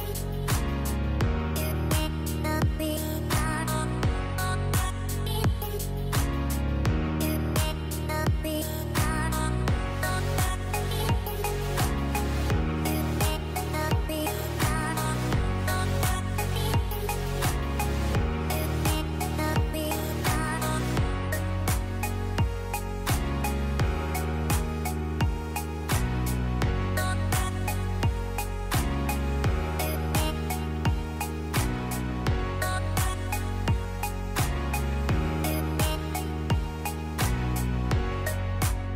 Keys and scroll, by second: 2.3 ctrl+alt+z, 6.8 space, 9.7 space, 34.2 shift+Left.